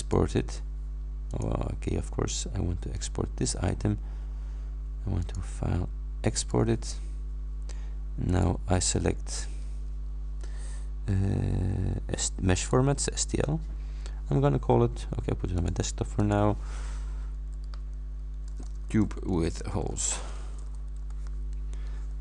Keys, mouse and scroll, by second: 0.1 click, 1.4 click, 3.0 click, 5.3 click, 6.5 click, 8.4 click, 12.6 click, 13.4 click, 15.6 click, 16.2 click, 17.8-21.3 typing.